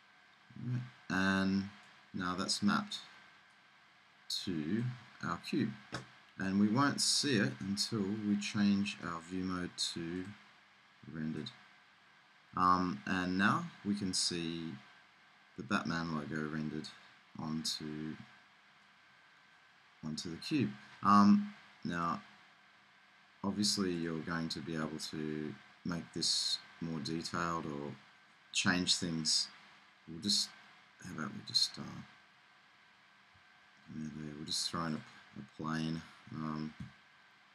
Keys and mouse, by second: 0.0-1.7 drag, 1.7 middle click, 3.6-4.9 drag, 5.6-6.6 middle drag, 8.3-9.6 middle drag, 10.4 click, 12.2-13.4 middle drag, 15.2-21.6 middle drag, 22.0-23.8 drag, 24.0-27.0 middle drag, 31.6-33.3 drag, 33.3 shift+a, 36.8 1.